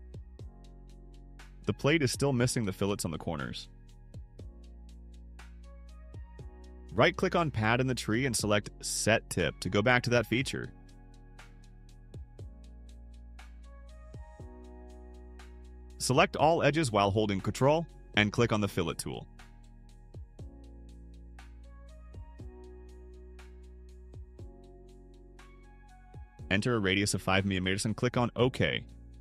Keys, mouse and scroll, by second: 9.1 right click, 12.9 click, 13.8 click, 16.0 click, 17.9 ctrl+click, 18.9 ctrl+click, 19.5 click, 21.2 ctrl+click, 25.0 click.